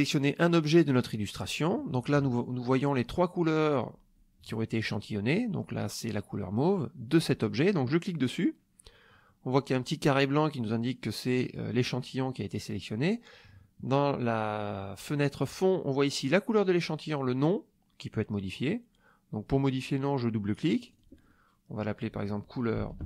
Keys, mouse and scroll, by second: 1.1 click, 7.1 click, 20.8 click, 21.7 click, 22.5-23.0 typing.